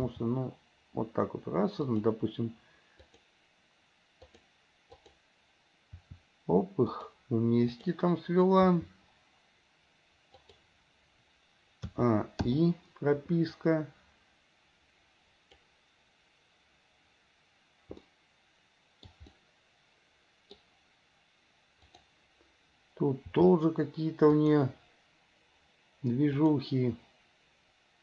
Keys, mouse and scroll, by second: 0.0 r, 3.2-3.5 drag, 4.5 click, 5.1 click, 6.2 r, 7.9 click, 8.8 r, 12.1 a, 12.8 i, 13.9-15.9 drag, 18.2-19.2 shift+middle drag, 19.5 middle click, 20.3 middle click, 22.0 click, 23.5 r, 26.5 click.